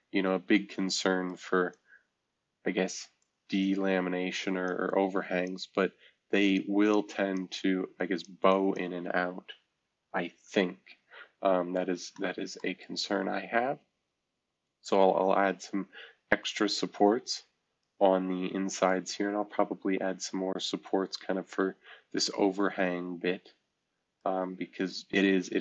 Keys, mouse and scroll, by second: 1.3 click, 2.3 click, 3.2-4.7 drag, 4.9 click, 6.5 click, 7.0 click, 8.0 click, 8.5 click, 10.4 shift+F2, 12.8-19.3 middle drag, 19.4-21.6 scroll up 1, 22.3-24.2 middle drag, 24.2-25.6 right drag.